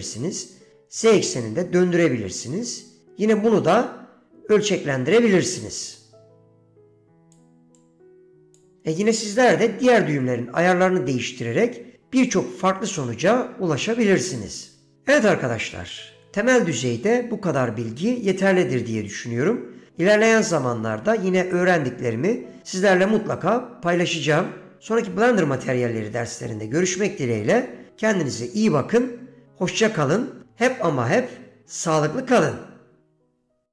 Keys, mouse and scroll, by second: 0.2-2.6 drag, 6.0-7.5 drag, 7.9 click.